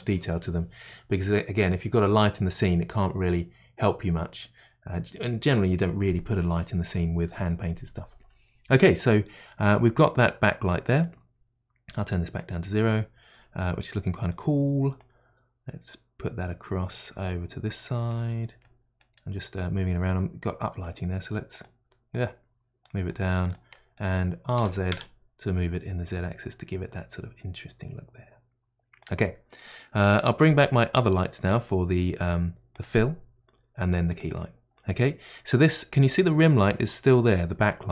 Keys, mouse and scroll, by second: 9.6-13.8 drag, 13.8-15.0 middle drag, 15.0-18.0 drag, 18.6-20.7 middle drag, 20.7 g, 21.6 g, 22.1-23.7 drag, 23.7-24.6 middle drag, 24.6 r, 32.8 click, 34.2-34.8 drag.